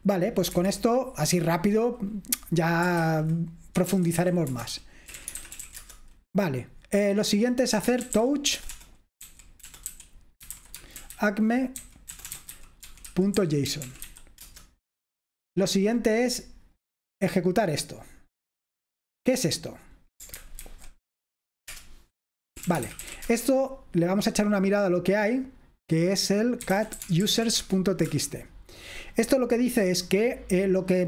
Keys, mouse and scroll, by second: 0.0 click, 0.6 Escape, 3.0-6.2 typing, 7.5-15.0 typing, 16.9-18.2 drag, 18.8-20.2 typing, 18.9 click, 19.5 click, 20.9 ctrl+alt+v, 21.7 Return, 22.3-23.6 typing, 25.8-27.9 typing, 28.1 Return, 30.9 typing.